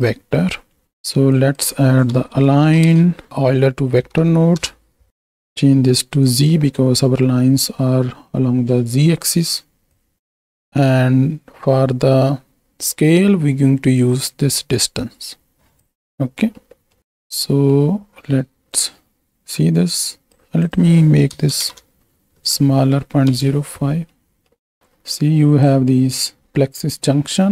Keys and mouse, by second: 0.3-0.8 right drag, 1.3-4.6 drag, 4.2 Down, 5.2 drag, 6.2 click, 7.9 middle click, 10.1 click, 10.4 middle click, 14.2-15.8 drag, 16.7 middle click, 17.0 click, 17.5 middle click, 18.7-20.3 drag, 20.6-23.3 drag, 24.2 middle click, 24.8 click, 26.0 middle click.